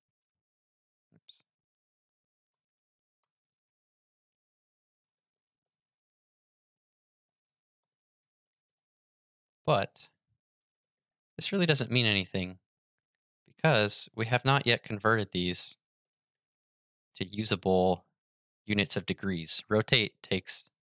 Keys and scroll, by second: 0.9 super+z, 2.5 super+v.